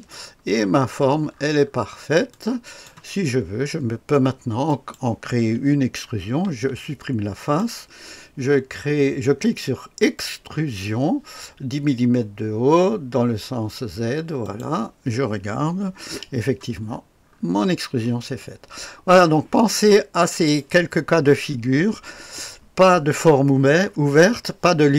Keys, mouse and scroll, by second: 0.1-2.3 scroll down 1, 2.3-2.8 drag, 4.6 click, 6.4 Delete, 7.4 click, 10.0 click, 14.4 click, 16.0 KP_0, 16.8-17.2 scroll up 1, 17.2-18.4 scroll down 1, 18.4-20.6 drag, 21.4 scroll up 1, 21.7-22.7 scroll down 1.